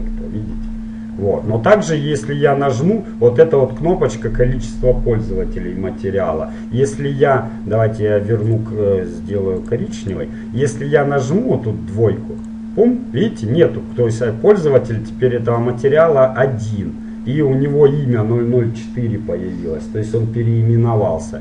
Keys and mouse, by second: 8.6-10.5 drag, 12.5-14.4 drag.